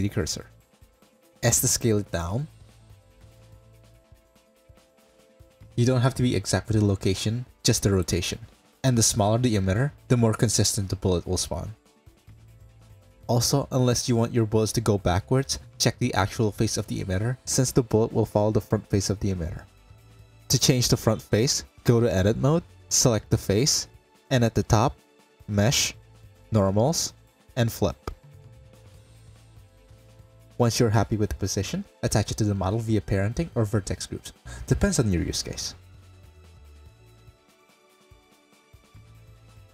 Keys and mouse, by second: 0.4 click, 1.1 s, 2.4 s, 3.4 KP_Decimal, 3.8 click, 4.3 s, 6.1 middle click, 6.9 s, 8.2 ctrl+a, 9.6 middle drag, 9.8 click, 10.5 click, 18.4 click, 20.6-22.0 drag, 22.4 middle click, 23.4 Tab, 24.5 click, 24.7 middle click, 25.0 a, 26.4-28.1 middle drag, 28.6 Tab, 29.4-30.3 middle drag, 33.1 click, 34.7 click, 35.2 click, 37.6 ctrl+p.